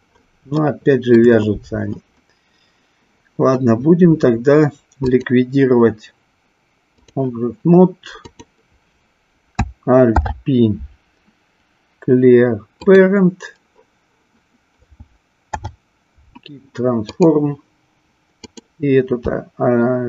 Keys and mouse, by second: 0.7-1.2 shift+middle drag, 5.1-7.1 drag, 10.0 alt+p, 15.4 alt+p, 18.4 click.